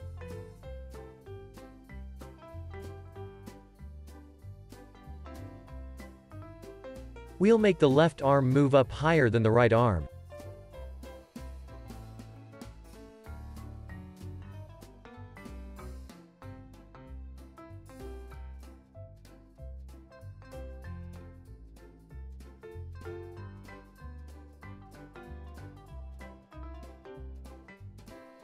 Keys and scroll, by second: 3.9 x, 5.8 x, 14.9 z, 16.3 x, 20.5 x.